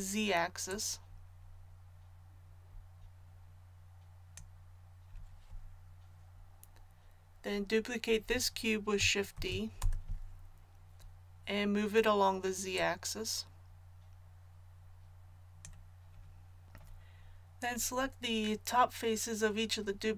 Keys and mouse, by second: 0.7-9.3 drag, 9.3 shift+d.